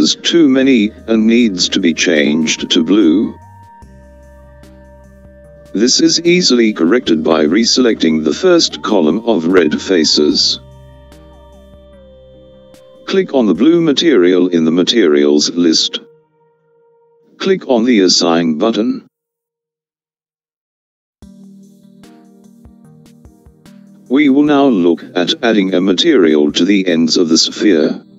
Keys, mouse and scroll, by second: 2.5-6.3 middle drag, 8.5 alt+click, 10.4 alt+click, 14.1-15.7 scroll up 4, 15.7 click, 19.2 click, 22.3 click, 25.4-27.7 middle drag.